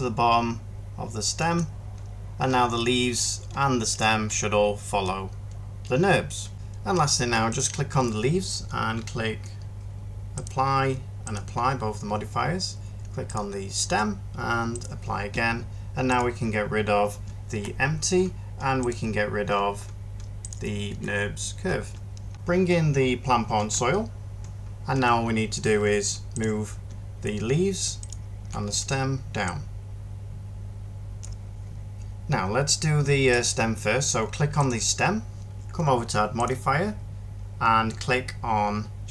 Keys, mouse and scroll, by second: 17.4 Delete, 20.8 Delete, 23.4 alt+h, 24.8 1.